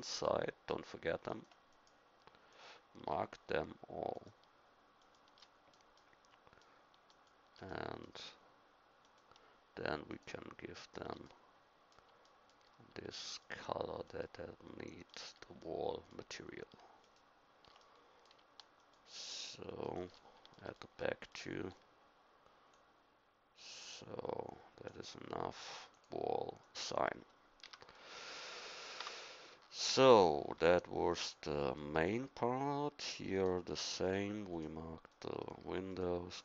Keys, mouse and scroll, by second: 5.4-9.8 middle drag, 9.8-11.3 right drag, 11.3-18.0 middle drag, 20.7 middle click, 21.6 c, 23.2-24.8 drag, 27.6 a, 29.0 Tab, 31.2 click, 32.0 Tab.